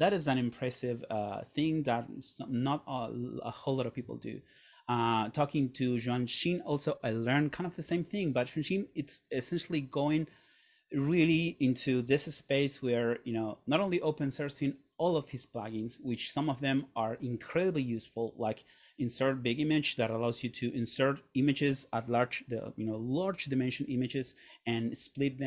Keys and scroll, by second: 4.1 Right.